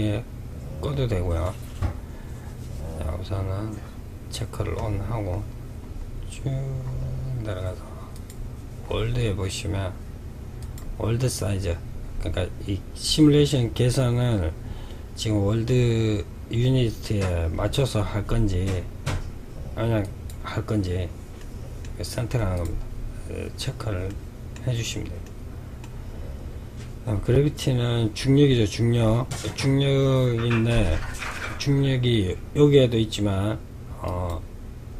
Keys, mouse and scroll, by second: 0.8-3.9 scroll up 2, 3.9-7.2 scroll down 22, 7.2 click, 7.9-9.7 scroll down 4, 9.7 click, 19.1 click, 20.5-21.7 middle drag, 21.7 click, 23.2-27.4 middle drag, 33.1 click.